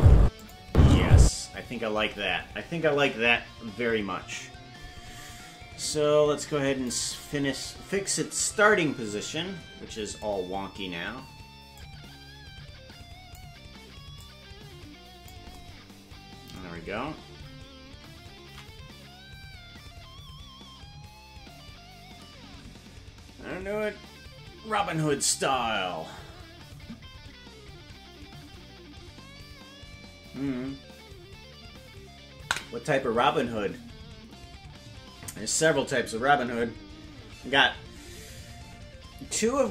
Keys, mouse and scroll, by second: 0.1 space, 0.6 space, 5.8-6.9 drag, 11.7-13.3 drag, 14.1-15.3 drag, 20.6 ctrl+s.